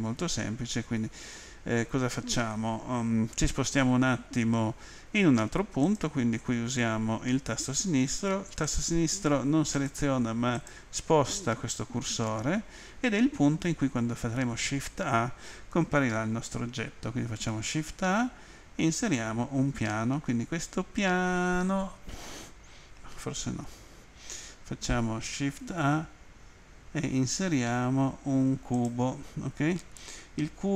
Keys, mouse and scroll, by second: 5.9 click, 8.6 click, 9.7 click, 10.6 click, 19.0 click, 23.6 ctrl+z, 28.7 click.